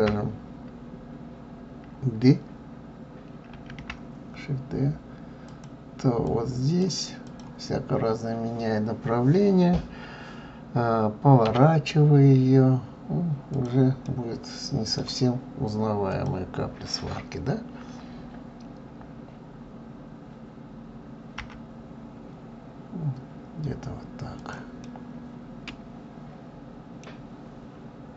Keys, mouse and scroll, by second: 3.5 shift+d, 6.2 click, 7.2 click, 14.0-16.1 middle drag, 16.1 click, 24.8-27.0 middle drag, 27.0-28.1 scroll down 5.